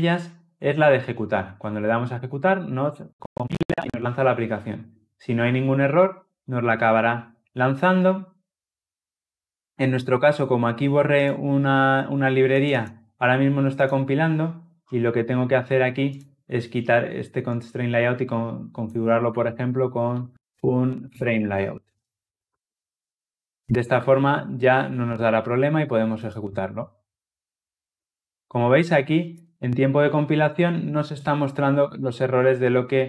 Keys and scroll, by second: 1.7 shift+F10, 21.8 Tab, 26.1 shift+F10.